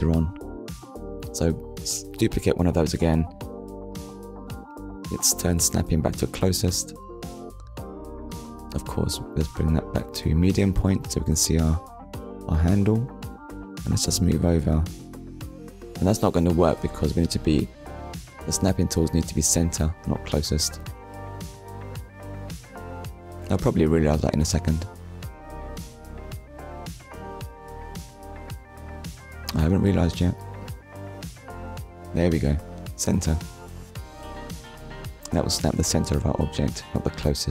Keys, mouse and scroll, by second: 1.3 right click, 2.4 click, 3.1 middle click, 4.0 click, 5.1 click, 7.0 click, 9.1 click, 10.2 click, 11.6 click, 12.3 ctrl+click, 15.9 middle click, 16.9 scroll up 1, 18.6 shift+middle click, 19.8 click, 21.0 click, 21.4 ctrl+click, 23.6 Tab, 24.4 Tab, 24.8 click, 26.8 click, 28.6 click, 29.5 click, 29.8 ctrl+click, 30.9 middle click, 31.9 click, 33.3 click, 34.5 click, 34.8 ctrl+click, 37.0 click.